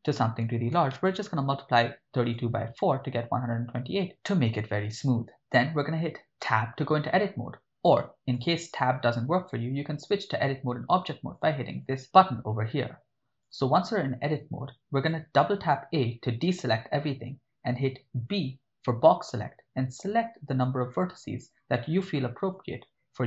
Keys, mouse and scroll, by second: 3.5 click, 6.4 Tab, 8.4-11.4 drag, 11.8-13.6 drag, 15.4 a, 15.6 a, 18.2 b.